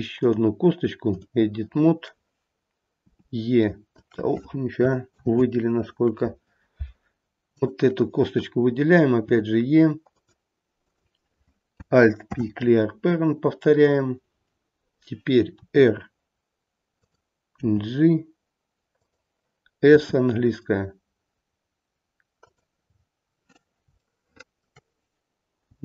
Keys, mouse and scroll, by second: 3.0 e, 5.1 ctrl+z, 7.4 click, 9.2 e, 10.7 click, 12.2 alt+p, 15.5 r, 17.6 g, 19.8 s, 22.9-23.8 scroll up 1, 23.8 scroll up 2, 24.0 shift+middle click, 25.7 g.